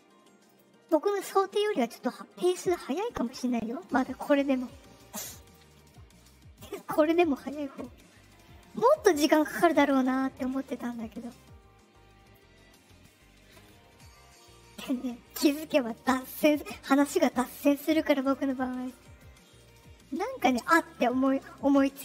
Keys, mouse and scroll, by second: 0.4 click, 1.7-2.7 drag, 5.3 click, 6.7 click, 8.7 click, 9.3 click, 9.7 click, 10.6 click, 11.3 click, 14.3-15.2 drag, 15.9 click, 18.1 click, 19.1-20.2 drag.